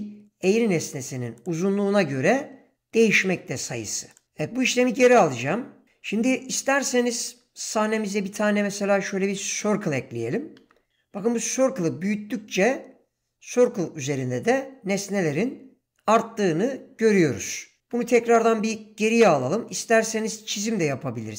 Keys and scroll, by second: 1.8 e, 7.8 shift+a, 12.8 s, 17.9 ctrl+z.